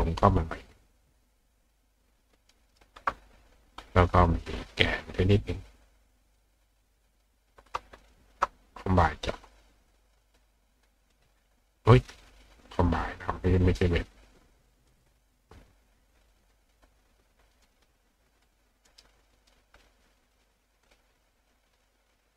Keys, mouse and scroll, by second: 0.2-2.7 shift+drag, 2.5 shift+right click, 6.4 click, 7.1 click, 8.0 shift+click, 11.0 click, 12.8 click, 14.9 click, 16.4 click, 17.7 click, 18.9 right click, 19.4 click, 20.1 click, 20.9 click, 21.8-22.3 drag.